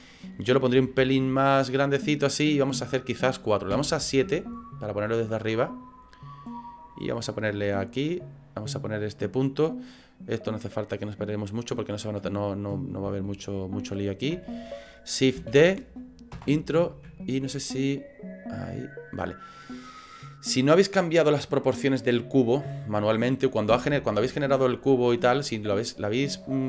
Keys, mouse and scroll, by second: 0.8 s, 2.7 scroll down 4, 3.7 KP_7, 5.1 click, 7.7 click, 9.9 click, 11.2 click, 12.9 scroll up 2, 13.2 shift+middle click, 15.4 shift+d, 17.2 ctrl+click, 23.8 Delete, 24.5 middle click, 24.8 middle click.